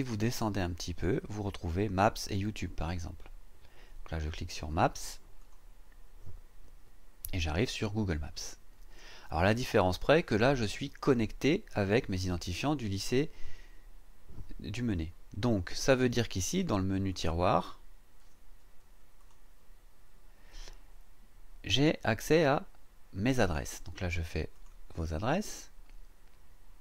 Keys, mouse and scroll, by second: 0.2-0.6 scroll down 2, 0.9 scroll down 2, 5.4 click, 17.1 click, 19.2 click, 24.5 click.